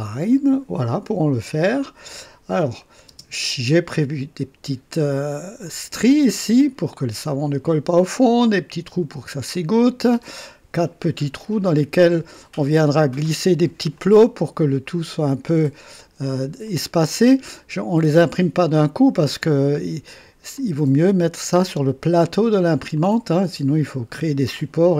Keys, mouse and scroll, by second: 2.8 click, 3.1 space, 3.7-4.4 drag, 5.6-6.8 drag, 7.6 click, 9.5-10.5 drag, 14.0-15.3 drag, 16.7 click, 18.6 click, 20.5 click, 22.9-23.6 drag.